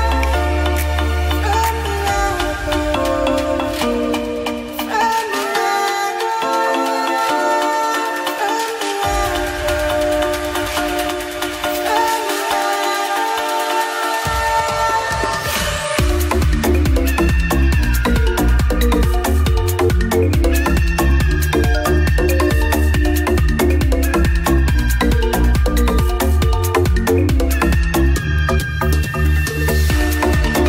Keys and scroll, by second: 0.2 ], 1.0 ctrl+z, 3.8 space, 4.5 space, 6.0 [, 6.8 space, 8.1 ctrl+s, 9.4 space, 11.2 [, 16.3 space, 19.2 space, 19.9 space, 20.8 space, 26.7 space, 27.8 ctrl+z, 30.0 space, 30.5 space.